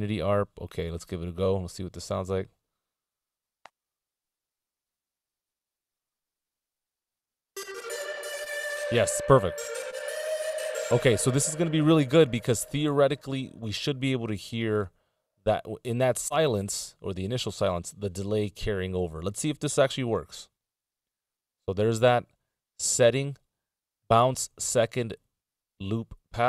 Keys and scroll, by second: 9.8 super+Return, 20.2 ctrl+b.